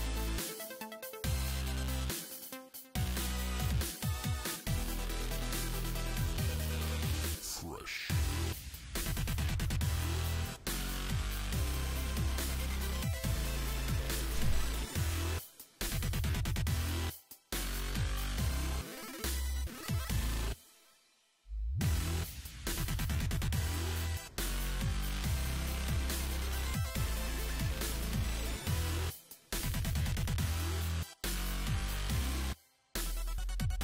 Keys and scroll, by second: 19.4 s, 20.0 s, 21.4 s.